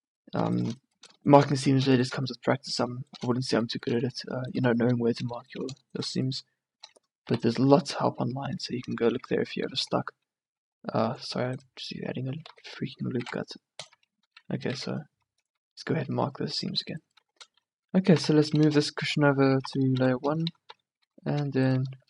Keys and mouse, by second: 5.4-7.0 middle drag, 7.4 u, 9.7 ctrl+r, 11.6 click, 12.5 ctrl+z, 13.2 ctrl+e, 14.7 ctrl+e, 16.2 Tab, 17.1 Tab, 17.3 a, 18.3 m, 19.2 Tab, 19.8 m, 20.8 2, 21.2 1.